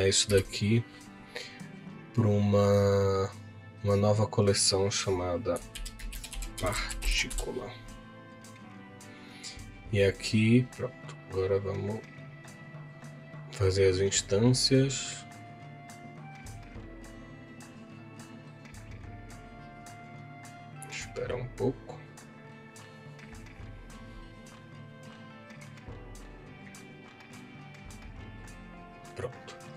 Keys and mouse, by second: 0.3 m, 11.5-27.8 drag.